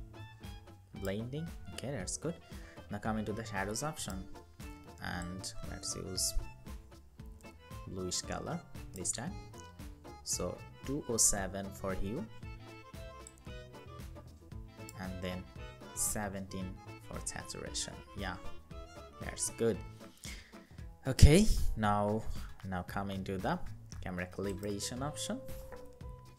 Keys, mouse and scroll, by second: 1.2-3.8 scroll up 1, 14.7 Up, 15.1 Up, 15.6 Up, 19.5-20.0 scroll down 1.